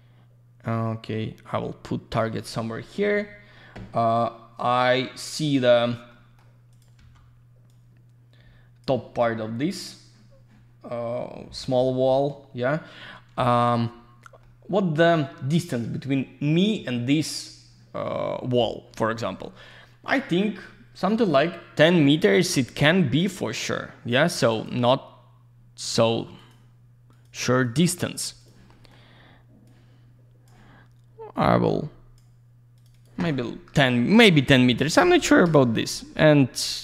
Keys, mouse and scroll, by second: 6.1 middle click, 6.7 click, 7.7 click, 22.9 alt+middle click, 24.5 click, 26.4 click, 27.1 click, 27.6 click, 27.7 double click, 28.4 click, 28.7 middle click, 29.6 click, 31.6 click, 32.7 click, 32.9 click, 33.0 double click, 34.1 typing, 35.4 Return, 36.3 scroll down 1, 36.6 alt+middle click.